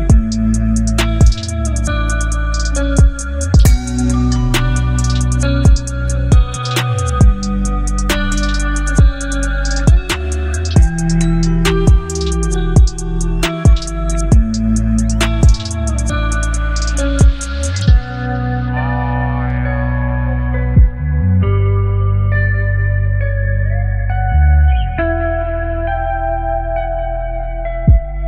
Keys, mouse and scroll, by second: 0.9 alt+scroll down 1, 3.1 space, 3.3-4.2 click, 3.7 space, 4.7 click, 5.7 t, 8.1 click, 10.4-12.4 drag, 13.2 ctrl+c, 14.2 click, 14.2 click, 16.2 ctrl+v, 17.4 ctrl+a, 18.7-20.3 drag, 27.1 click, 27.6-28.2 scroll up 1.